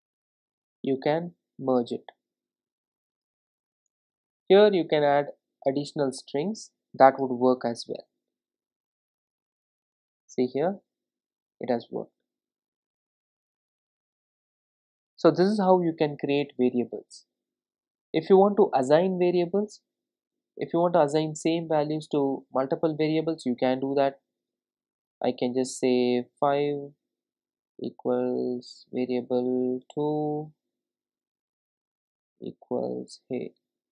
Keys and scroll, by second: 8.4 ctrl+r, 29.9 Return.